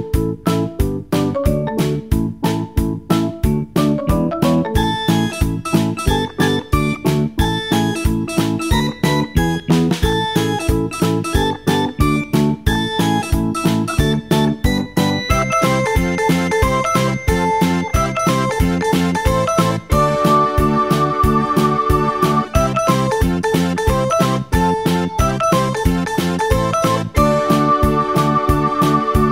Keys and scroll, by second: 18.6 Escape.